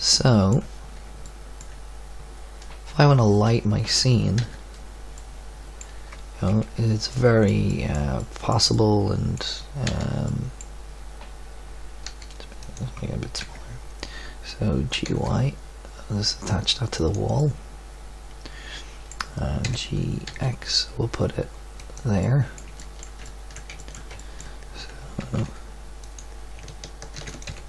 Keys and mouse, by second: 4.5 z, 6.4 KP_Decimal, 9.8 z, 12.0 s, 13.4 KP_3, 14.9 g, 17.7 middle click, 19.6 g, 25.1 g, 27.1 shift+d, 27.4 g.